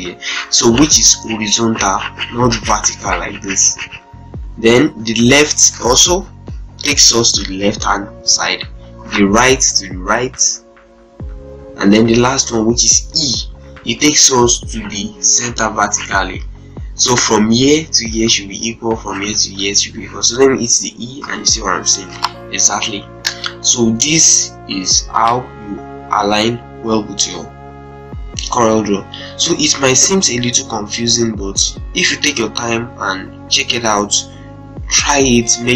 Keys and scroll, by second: 5.9 l, 8.8 r, 21.0 e.